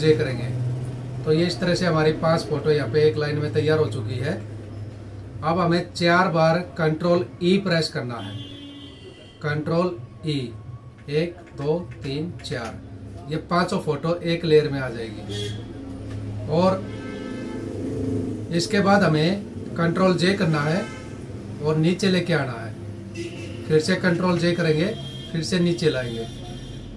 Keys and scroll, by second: 2.1 Up, 3.7 Right, 10.5 ctrl+e, 15.5 Up, 19.8 ctrl+j, 23.6 ctrl+j.